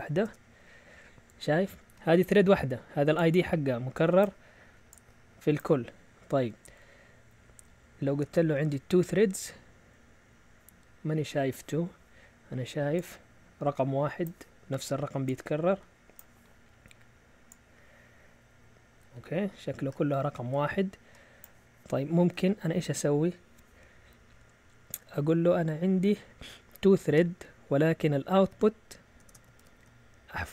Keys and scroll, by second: 0.2 Return, 6.3 Up, 8.2 BackSpace, 8.7 2, 9.0 Return, 22.6 Up, 28.4-30.5 typing.